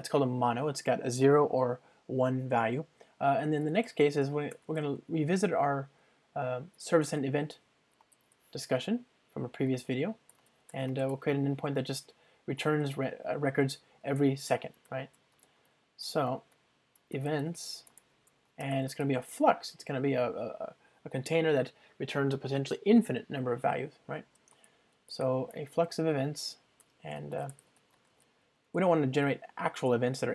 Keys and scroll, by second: 4.6 Return, 8.1 Return, 12.7 Return, 29.9 alt+Return.